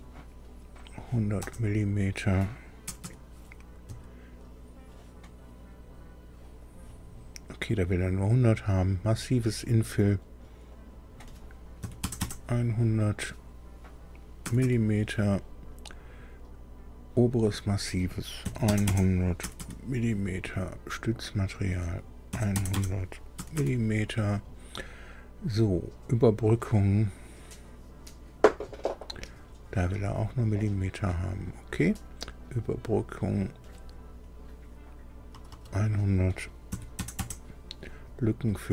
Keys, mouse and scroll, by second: 1.4 KP_0, 2.8 m, 3.5 m, 3.8 Down, 6.6 click, 10.1 click, 10.7 click, 11.8 KP_1, 12.1 KP_0, 12.2 KP_0, 14.4 m, 14.6 m, 17.3 click, 18.4-19.5 typing, 21.4 click, 22.2-23.5 typing, 26.4 click, 28.5 click, 32.9 click, 35.3 BackSpace, 35.4 BackSpace, 36.6 KP_1, 36.9 KP_0, 37.1 KP_0, 38.6 click.